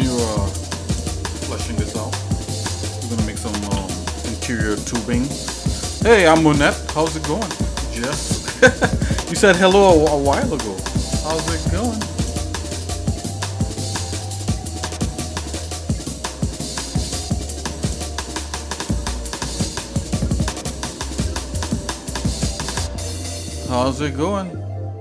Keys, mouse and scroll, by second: 0.2 middle click, 0.7 middle click, 2.0 click, 2.4 middle click, 3.8 ctrl+s, 4.9 shift+middle click.